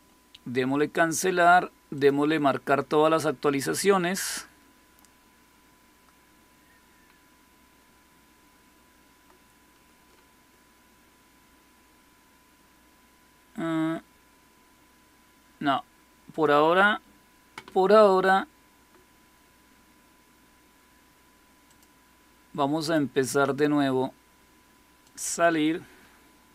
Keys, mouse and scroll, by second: 1.8 click, 11.7-12.3 scroll down 1, 12.3-13.5 scroll down 1, 13.5-15.8 scroll down 1, 15.8-16.2 scroll down 1, 16.2 click, 21.5 click, 22.7 click, 24.9 click.